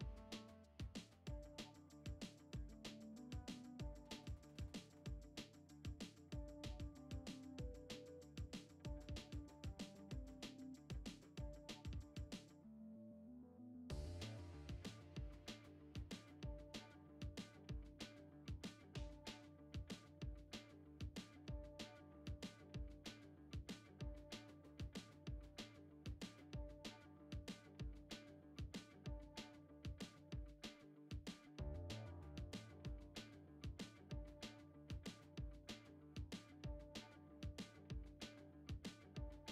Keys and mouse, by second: 0.9 shift+middle drag, 1.6 x, 3.1 click, 5.4 shift+click, 6.5 shift+click, 7.2 shift+click, 8.0 middle click, 8.5 shift+middle click, 10.0 shift+click, 10.6 shift+click, 10.9 middle click, 11.5 shift+middle click, 12.8 shift+click, 13.9 middle click, 14.8 shift+click, 15.7 shift+click, 16.2 shift+click, 16.9 shift+click, 17.3 shift+click, 18.0 middle click, 18.8 shift+middle click, 20.0 shift+click, 22.5 s, 24.4 s, 27.0 a, 27.4 alt+e, 29.9 Tab, 30.6 right click, 31.7 click, 32.5-33.1 drag, 33.9-35.0 drag, 35.3 click, 36.8 g, 38.0 g, 39.1-39.5 shift+middle drag.